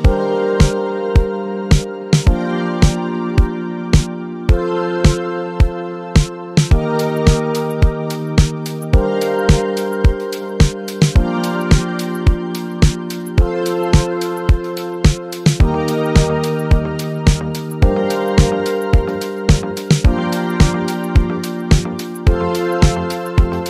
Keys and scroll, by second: 14.5-16.3 typing, 18.6 e, 22.1 e, 22.5 BackSpace, 22.7 e.